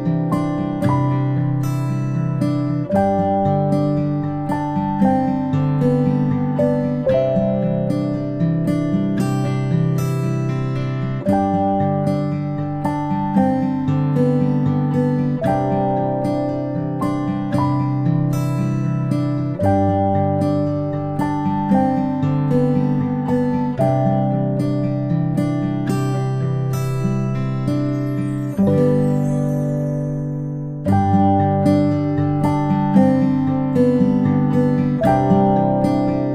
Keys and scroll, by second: 1.9 ctrl+z, 4.3 ctrl+z, 9.6 space, 9.9 space, 13.8 a, 24.3 ctrl+space, 31.6 ctrl+space, 35.6 ctrl+space.